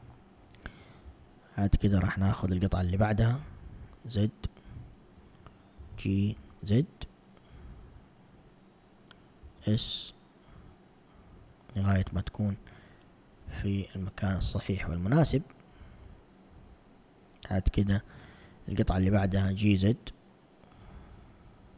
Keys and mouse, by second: 1.2 z, 2.5 alt+click, 3.9 z, 5.8 g, 9.5 s, 17.2 alt+click, 19.1 g.